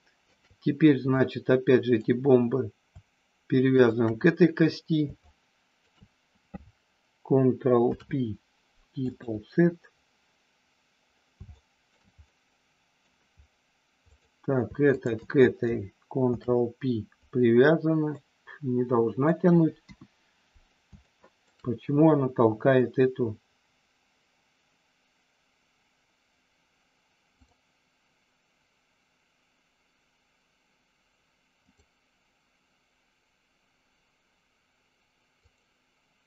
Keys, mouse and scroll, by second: 1.1 click, 3.7 shift+click, 5.2 shift+click, 7.7 ctrl+p, 11.6 shift+middle click, 12.2 middle click, 14.1 click, 14.8 shift+click, 16.4 ctrl+p, 18.1-19.2 middle drag, 19.8 KP_1, 21.1 shift+middle click, 27.4-31.7 drag, 35.4 click.